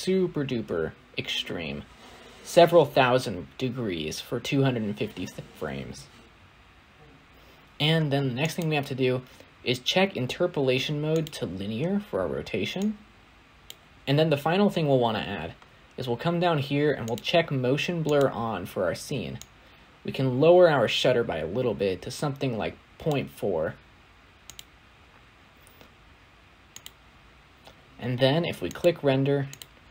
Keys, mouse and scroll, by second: 1.3 click, 7.2 click, 11.2-13.9 right drag, 13.9-22.3 drag, 24.3 click, 25.0-25.8 scroll up 2, 25.8 click, 26.3 scroll up 1, 26.5 shift+middle click, 27.0 space, 27.2 space, 27.3-28.7 middle drag, 28.7-29.9 drag.